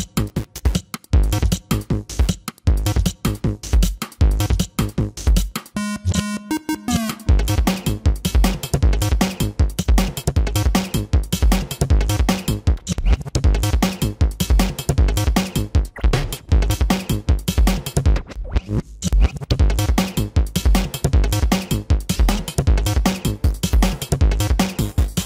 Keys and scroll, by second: 2.9 ctrl+alt+z, 7.7 space, 12.4 space, 22.4 ctrl+=, 23.3 ctrl+=.